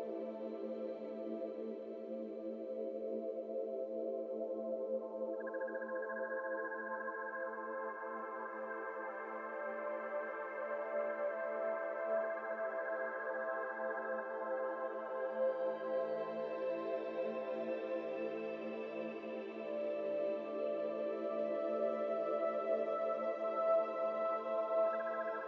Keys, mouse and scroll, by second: 1.2-3.1 drag, 3.1 middle click, 3.3-3.6 scroll down 1, 3.6 middle click, 3.8-4.2 scroll up 2, 4.2 e, 5.5-6.5 shift+middle drag, 6.5 alt+z, 7.0 alt+shift+click, 7.7 s, 9.2 alt+z, 9.3-9.8 scroll down 2, 9.4 middle click, 9.7 Tab, 9.8-10.7 middle drag, 10.7 scroll up 2, 10.9-12.1 middle drag, 12.1 Tab, 12.2 middle click, 12.6 alt+z, 13.1 alt+shift+click, 13.7 alt+z, 14.0 g, 14.9 z, 14.9 z, 15.1 g, 16.2 middle click, 16.4 Tab, 16.6 scroll down 2, 16.6-17.3 middle drag, 17.3-18.0 right drag, 18.0-18.6 middle drag, 18.6-19.5 right drag, 19.5 middle click, 19.7-20.1 scroll up 2, 20.1 click, 20.3-20.7 middle drag, 20.7 Tab, 20.9 middle click, 21.4-22.0 scroll up 1, 22.0 3, 22.2 click, 22.6 middle click, 23.1 2, 23.5 alt+click, 24.4 alt+shift+click, 24.8 shift+middle click.